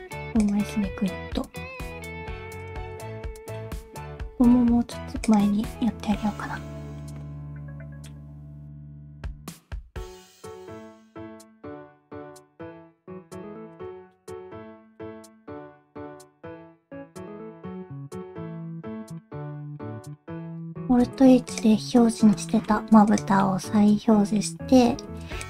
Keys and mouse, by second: 0.7 middle click, 2.0 alt+z, 2.6 click, 2.9 alt+z, 3.1 middle click, 4.3 g, 5.8 middle click, 6.6 middle click, 7.2 middle click, 8.7 middle click, 9.3 alt+z, 9.5 click, 9.7 alt+z, 10.0 alt+z, 10.3 shift+click, 10.5 s, 11.1 middle click, 12.0 alt+z, 13.0 g, 14.1 middle click, 15.4 shift+click, 15.8 g, 16.6 click, 16.7 g, 17.2 middle click, 17.6 alt+z, 17.6 alt+z, 17.7 click, 17.9 shift+click, 18.3 KP_1, 18.7 g, 19.6 click, 20.0 alt+z, 20.8 alt+h, 21.5 click, 22.5 shift+middle click, 23.1 click, 23.4 middle click, 25.0 alt+z, 25.4 click.